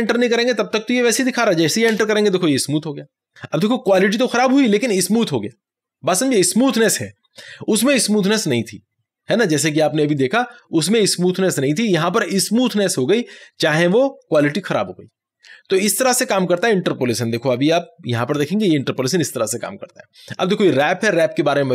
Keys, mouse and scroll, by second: 1.9 Return, 17.4 click, 18.2 ctrl+t.